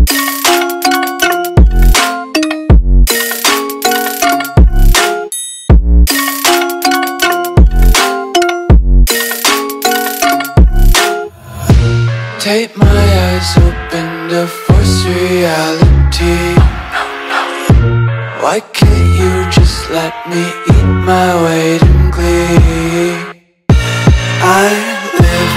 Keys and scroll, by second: 1.0 space, 4.3 space, 18.8 space, 20.9 Delete, 21.5-23.4 typing, 22.2 super+space, 22.3 super+space, 22.4 super+space, 22.5 super+space, 22.6 super+space.